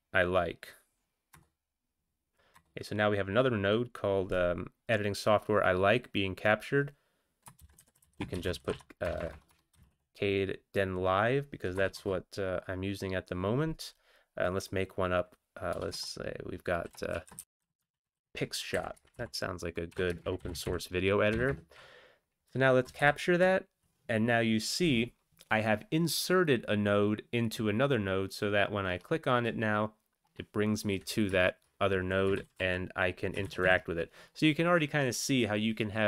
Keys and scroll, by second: 1.3 Return, 2.5 Return, 7.6-9.9 typing, 11.7 Return, 12.1 Return, 15.7 BackSpace, 17.1-18.1 typing, 18.7 Up, 18.9 Up, 19.3 Right, 20.0-21.5 typing, 22.8 ctrl+c, 23.0 ctrl+c, 32.4 ctrl+x, 32.8 1, 33.4 ctrl+x, 33.6 ctrl+s.